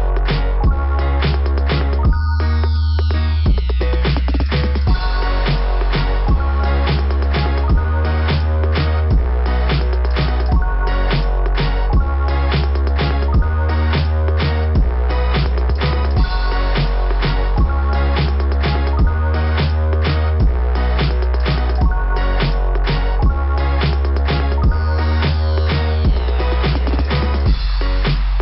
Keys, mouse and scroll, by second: 6.1 click, 6.3 click, 6.6 click, 7.6 scroll up 2, 12.6 click, 15.0-15.6 scroll up 3, 17.7 right click, 19.0 click, 20.8 click, 20.9 click, 22.2 s, 26.6 click, 28.2 click.